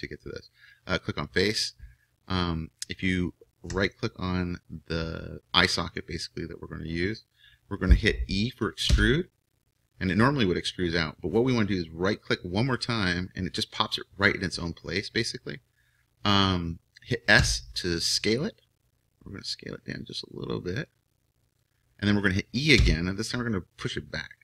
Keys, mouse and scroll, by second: 3.8-8.9 right drag, 8.9 e, 17.4 s, 22.8 e.